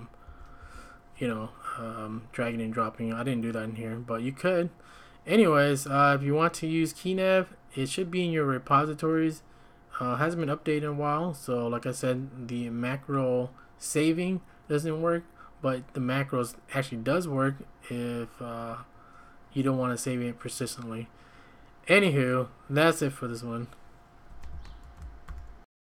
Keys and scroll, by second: 0.0-1.3 typing, 24.8 ctrl+a, 25.2 0.